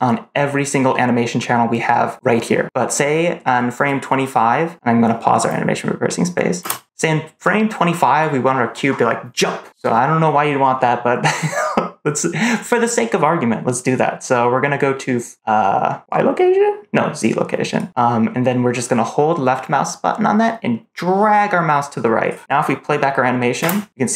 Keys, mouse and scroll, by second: 0.2-0.8 scroll down 2, 0.8-1.3 scroll up 2, 1.3-2.6 scroll down 2, 3.7 click, 6.5 space, 6.8 click, 17.7-22.2 drag, 23.5 space.